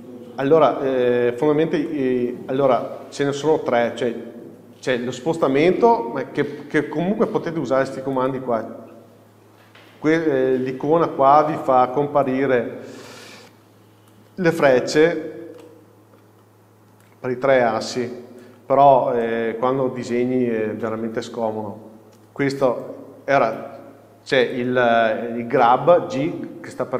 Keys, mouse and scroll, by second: 0.5 KP_7, 8.4-11.5 drag, 12.5-15.8 drag, 15.8-17.2 middle drag, 17.2-19.5 drag, 19.0-19.5 scroll down 2, 19.5-22.8 middle drag, 22.8-26.9 drag.